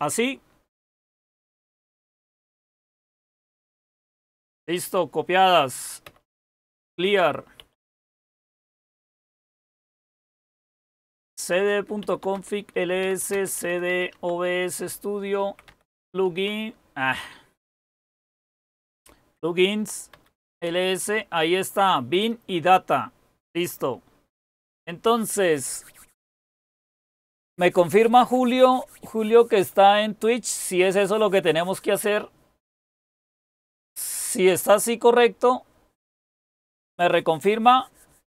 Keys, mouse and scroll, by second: 3.2-4.4 typing, 6.1-16.7 typing, 18.7-20.6 typing.